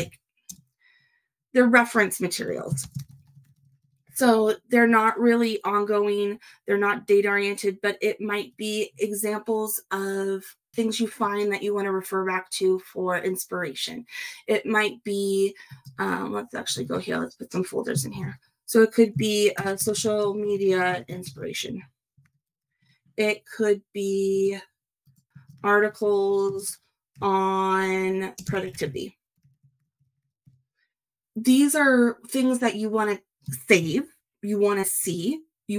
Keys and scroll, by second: 2.8 shift+9, 4.5 shift+0, 18.1 shift+f, 19.6 shift+s, 20.4 shift+m, 21.0 shift+i, 25.5 shift+a, 28.6 shift+p.